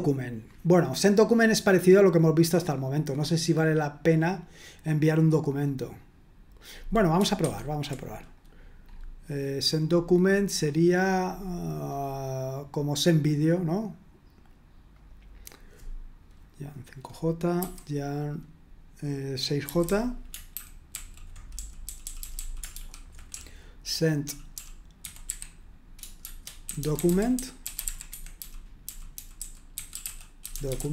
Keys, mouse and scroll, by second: 7.5 super+1, 8.3 click, 9.1-11.0 scroll up 1, 11.0-11.9 scroll down 1, 11.9-13.0 scroll up 1, 14.9 click, 17.6 y, 19.4-25.0 typing, 20.5 ctrl+d, 20.9 ctrl+d, 26.0-30.9 typing, 28.1 Escape.